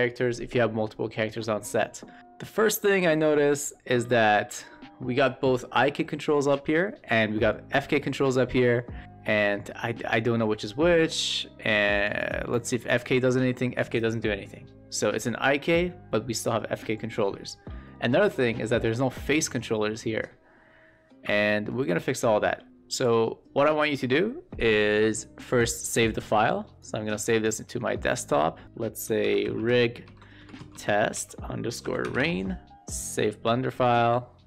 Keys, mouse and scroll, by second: 4.0 shift+middle drag, 4.5-5.4 middle drag, 7.9 middle click, 12.4 w, 12.8 e, 13.2 click, 17.8 shift+middle drag, 18.5 middle click, 19.2 q, 19.5-21.6 middle drag, 22.6 shift+middle click, 25.5-27.4 drag.